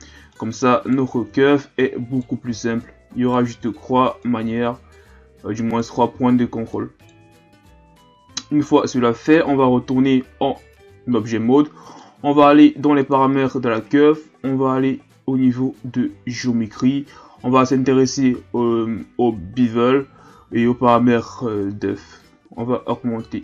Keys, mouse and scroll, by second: 0.3 right click, 1.2 ctrl+z, 1.8 right click, 2.5 ctrl+z, 2.8 right click, 3.5 ctrl+z, 4.2 right click, 6.1 ctrl+z, 6.7 right click, 7.3 ctrl+z, 8.5 Tab, 11.6-13.1 drag, 15.0-16.3 scroll down 3, 16.3-16.7 drag, 16.7-19.9 scroll down 5, 20.3 scroll down 1, 22.2-23.4 drag.